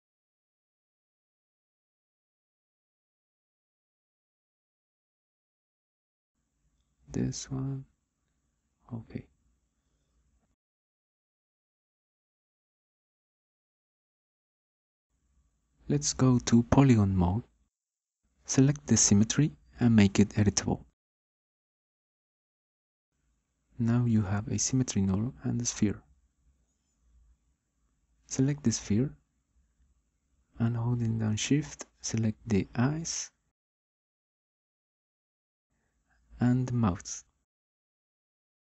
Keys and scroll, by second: 15.7 9.